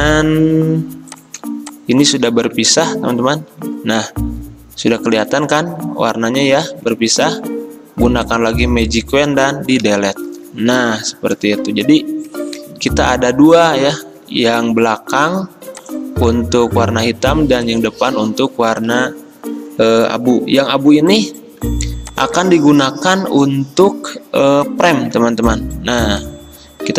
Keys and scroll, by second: 2.4 ctrl+z, 3.6 Delete, 6.9 ctrl+z, 9.9 Delete, 10.9 Escape, 14.3 ctrl+z, 17.2 v, 18.3 ctrl+z, 25.2 ctrl+z.